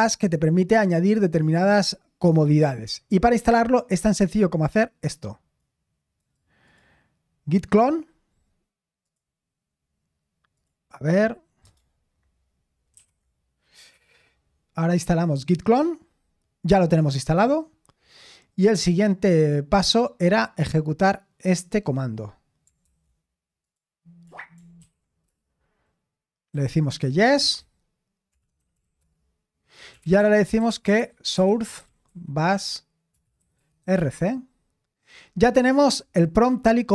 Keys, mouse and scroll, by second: 4.7-5.7 drag, 6.1 right click, 6.6 click, 9.0 click, 10.5 click, 13.0 ctrl+v, 13.9 Return, 19.0 click, 21.8 click, 22.9 ctrl+c, 22.9 ctrl+click, 23.6 click, 24.8 ctrl+shift+v, 25.2 Return, 26.5 y, 28.0-34.3 typing, 35.5-36.9 typing.